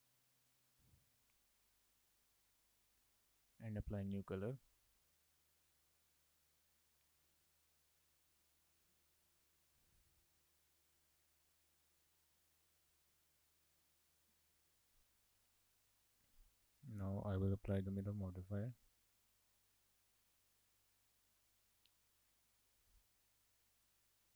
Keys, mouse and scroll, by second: 0.2 shift+click, 0.5 scroll down 4, 0.7 shift+middle click, 1.2 click, 2.4 click, 4.2 click, 6.7 click, 7.2 click, 8.2 click, 8.9 BackSpace, 10.6 click, 12.6 click, 14.6 shift+middle click, 14.7-15.8 scroll up 3, 16.8 scroll down 2, 17.0 shift+middle click, 18.5 click, 19.8 right click, 20.6 click, 23.9 click.